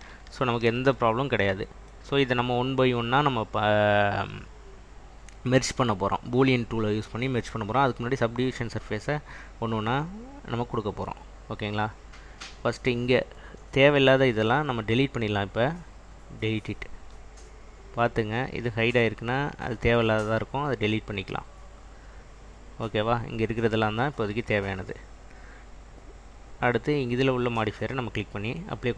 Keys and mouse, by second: 13.3 click, 14.9-16.2 right drag, 18.9 click, 19.9-20.9 right drag, 26.8 click, 28.4-28.9 drag.